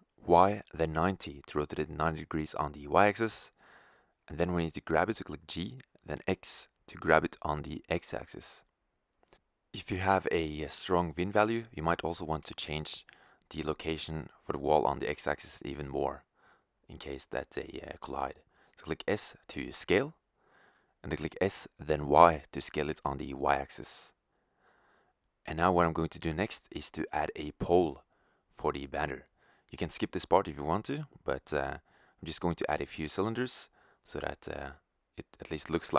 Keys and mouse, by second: 4.1 g, 8.6-8.9 drag, 8.9-11.4 middle drag, 11.4-15.0 drag, 15.0-18.0 middle drag, 17.3 s, 20.7 s, 23.2-24.2 drag, 25.1-28.7 middle drag, 28.7 shift+a.